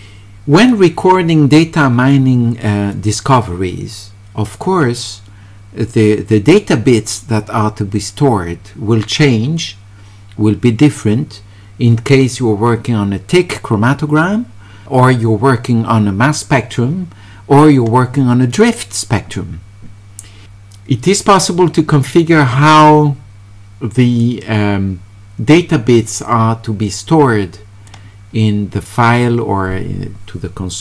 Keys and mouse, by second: 18.5 click, 20.4-24.2 drag, 26.3-27.9 drag.